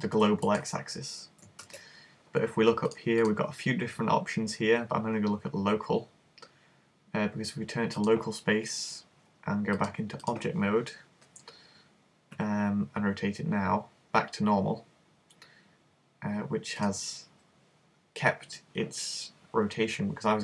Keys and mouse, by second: 1.6 super+z, 2.9 click, 10.3 click, 12.4 r, 16.9 click.